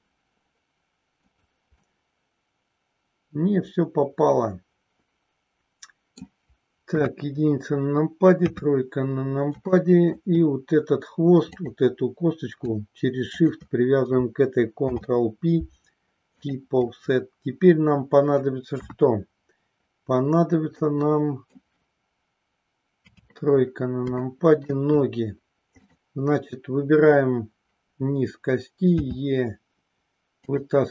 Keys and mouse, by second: 1.8-6.2 middle drag, 6.8 KP_1, 8.4 KP_3, 9.7 shift+middle click, 11.6 click, 14.7 ctrl+p, 18.7 KP_1, 20.7 middle click, 22.9 KP_3, 24.1 shift+middle click, 25.7 click, 28.9 e.